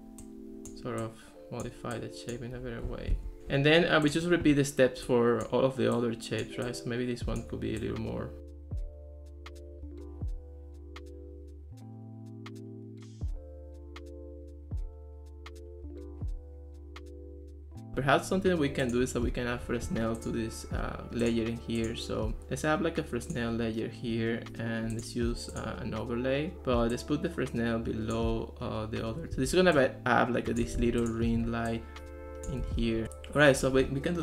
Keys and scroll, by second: 3.2 Escape, 9.1 Escape, 12.1 super+z, 12.8 super+z, 14.7 Escape, 17.9 alt+r, 29.3 ctrl+s, 29.5 ctrl+s, 30.8 ctrl+x, 31.6 ctrl+s, 32.7 ctrl+x.